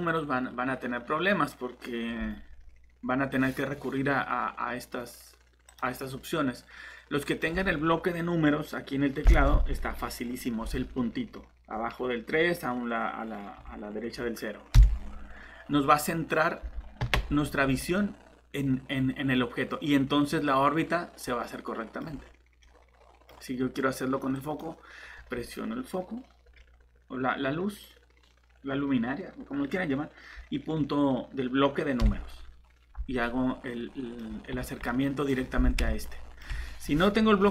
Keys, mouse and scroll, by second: 17.2 scroll down 1, 18.0 middle click, 22.0 scroll down 1, 22.6 middle click, 24.3 click, 33.2 middle click, 34.2 scroll down 1, 34.9 middle click, 36.4 typing.